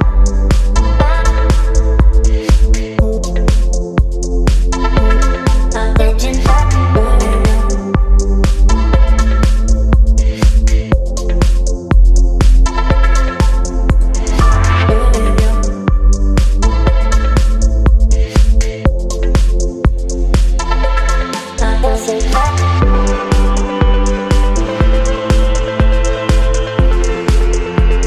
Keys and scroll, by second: 6.3 ctrl+t, 9.6 Return, 10.4 space, 13.0 b, 13.6 [, 14.7 [, 15.6 x, 19.8 space, 21.5 space, 25.1 space, 25.9 v, 26.9 space.